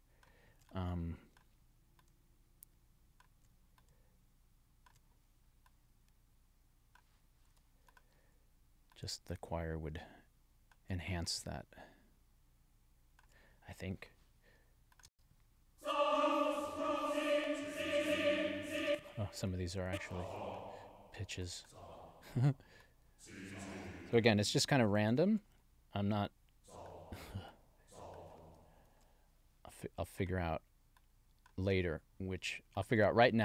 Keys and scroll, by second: 15.0 space, 18.8 space, 24.4 alt+Down, 25.1 alt+Down, 28.8 alt+Down, 29.7 alt+Down.